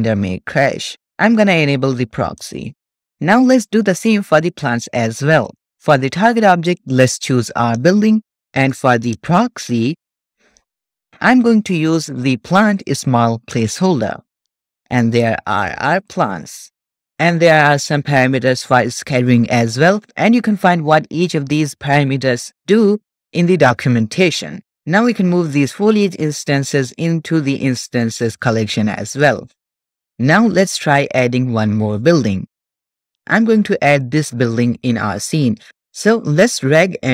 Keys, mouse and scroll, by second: 2.3 click, 4.4 click, 5.4 click, 6.6-7.9 drag, 8.5-9.1 scroll down 1, 9.1-13.7 drag, 14.7-15.8 scroll up 3, 15.8 shift+middle click, 15.8-16.5 scroll up 1, 16.5 middle click, 16.5-17.0 scroll up 1, 25.4 click, 27.6 drag, 33.9 click, 36.5 click.